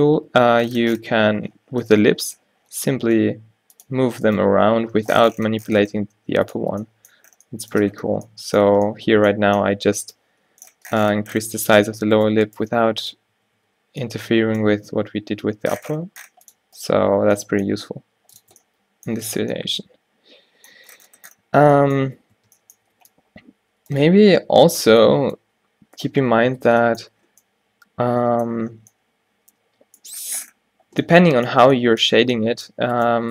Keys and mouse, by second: 0.4 g, 3.5 middle click, 4.4 click, 4.6 g, 4.8-6.2 drag, 6.7 Tab, 8.9 a, 11.5 Tab, 12.7 q, 13.5 q, 13.7 q, 14.8 g, 16.5 click, 17.1 q, 17.3 q, 17.8 g, 18.5 Tab, 21.8 Tab, 22.2 Tab, 22.5 Tab, 22.9 a, 23.1 b, 24.4 q, 24.7 a, 25.0 b, 26.2 q, 26.8 Tab, 31.7 Tab, 32.3 a.